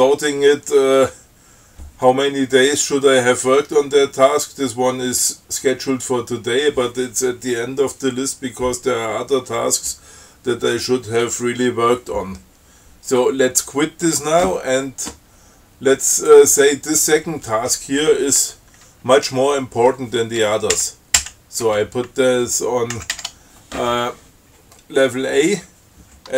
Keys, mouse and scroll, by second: 14.3 q, 16.5 click, 21.1 shift+Up, 23.2 ctrl+x, 23.4 ctrl+s.